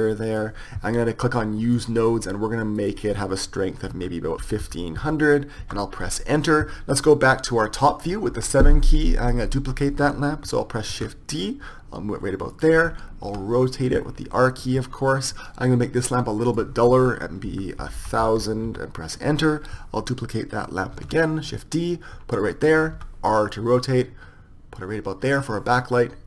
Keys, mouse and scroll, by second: 1.8-4.9 drag, 5.2 KP_0, 6.7 KP_1, 8.7 KP_7, 11.3 shift+d, 13.7 r, 16.9-19.8 drag, 18.5 KP_0, 21.5 shift+d, 23.6 r.